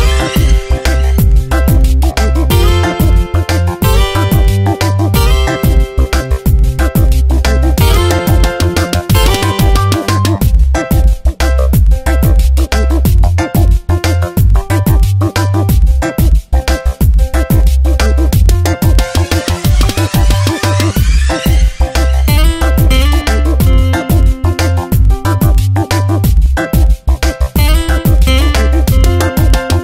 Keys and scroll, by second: 1.8 Return, 2.2 v, 3.3 shift+Down, 5.3 space, 6.3 s, 12.2 ctrl+[, 15.1 ctrl+t, 19.4 Return, 21.6 shift+Down, 22.2 Tab, 22.8 ctrl+t, 24.5 Return, 25.1 Down, 25.4 Left, 26.0 Down, 26.7 Right, 27.9 Down, 28.4 Left, 28.8 Down.